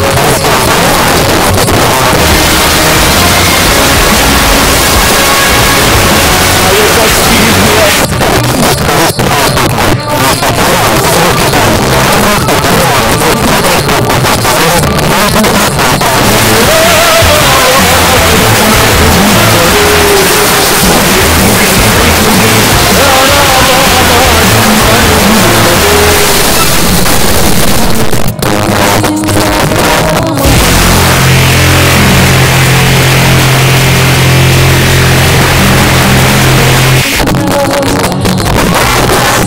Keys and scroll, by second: 7.9 Page_Down, 37.0 Page_Down.